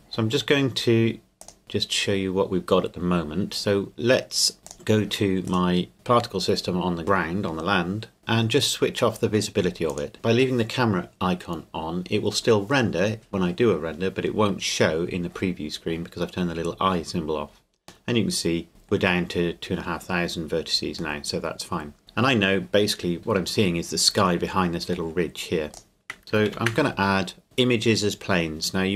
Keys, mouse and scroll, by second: 1.4 click, 1.6 middle click, 4.6 click, 5.5 right click, 9.9 click, 18.1 middle click, 21.2 middle click, 22.0-22.6 scroll down 1, 25.7 click, 26.4 shift+a.